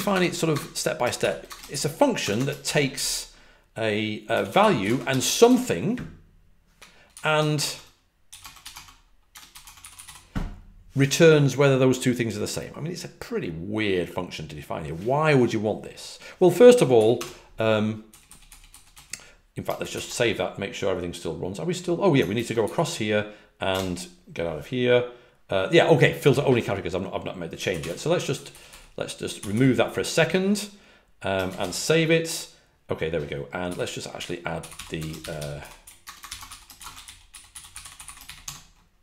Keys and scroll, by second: 0.0-0.4 typing, 2.2 typing, 4.2-5.5 typing, 9.2-10.4 typing, 16.9-18.8 typing, 19.9 typing, 23.3-24.1 typing, 28.1-29.4 typing, 31.6 typing, 33.5-38.4 typing.